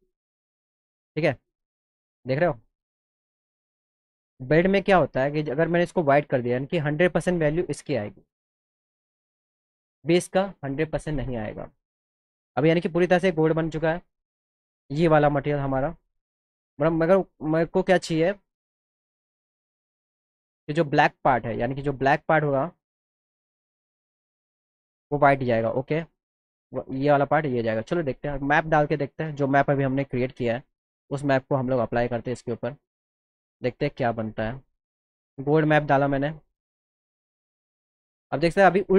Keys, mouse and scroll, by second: 0.6 click, 2.2 click, 2.4 click, 3.5 click, 21.8 click, 22.2 click, 23.5 click, 25.6 click, 27.5 click, 28.6 click, 29.8 click, 30.0 click, 32.3 click, 35.1 click, 35.3 click.